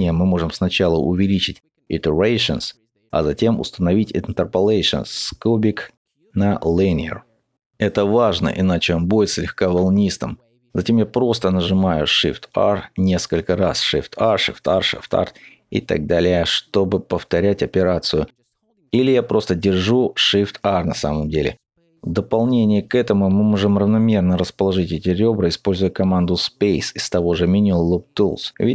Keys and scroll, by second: 10.9 shift+r.